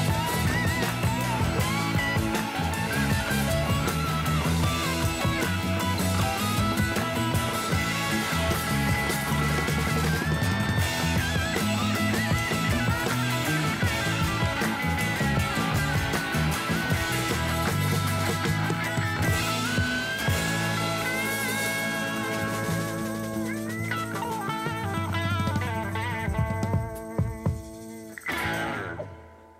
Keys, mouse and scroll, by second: 1.5 click, 2.5 click, 3.7 0, 4.8 click, 5.4 click, 7.5 0, 8.5 click, 9.3 click, 12.6 0, 13.8 click, 14.4 click, 15.3 0, 16.3 click, 16.8 click, 17.7 0, 19.3 click, 19.8 click.